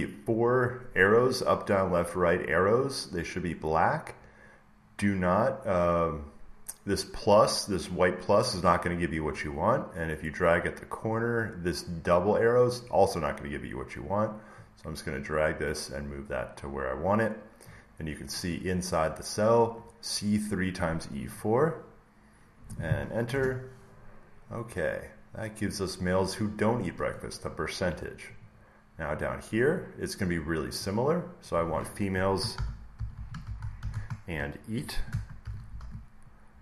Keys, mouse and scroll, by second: 17.5 click, 23.2 Return, 25.6 click, 28.5-30.4 drag, 32.2-36.6 typing, 32.5-33.8 drag.